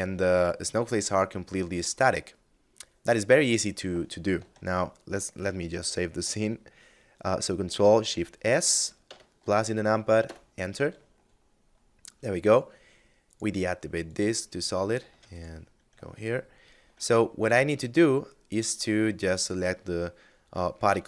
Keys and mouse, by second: 7.0 ctrl+shift+s, 8.0 KP_Add, 9.5 Return, 12.5 click, 14.1 ctrl+s, 14.3 click, 15.4 shift+middle click, 17.1 middle click, 18.3 right click.